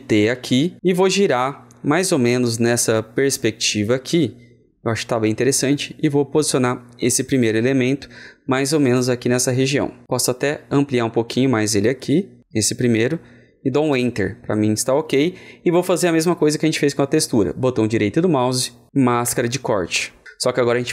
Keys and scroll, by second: 0.0 ctrl+alt+t.